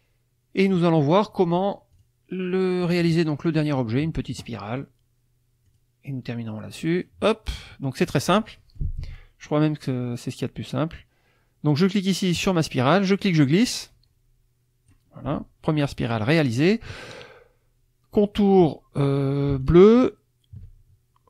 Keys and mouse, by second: 1.9 click, 3.3 click, 5.7 click, 7.0 click, 7.6 click, 8.4 click, 8.7 middle click, 12.3 click, 13.2-15.1 drag, 16.1 middle click, 19.6 shift+click.